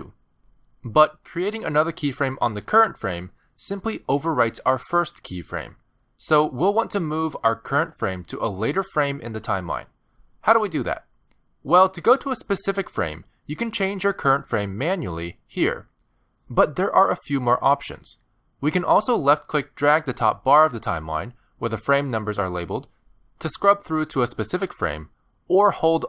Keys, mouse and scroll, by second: 4.9 g, 6.3 g, 7.5 g, 14.9 click, 15.8 click, 20.4 click.